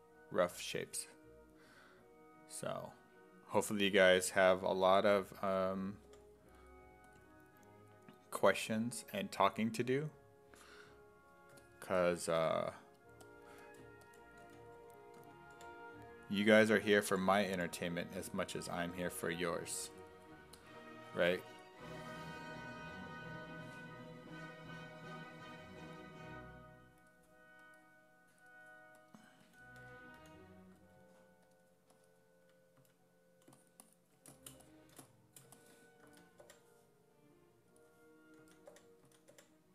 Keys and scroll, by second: 5.4 s, 6.1 4, 14.2-17.1 typing, 18.9 s, 19.2 5, 29.5 d, 29.8 d, 30.2 d, 32.8 s, 36.1 s, 36.4 4, 38.2-39.7 typing.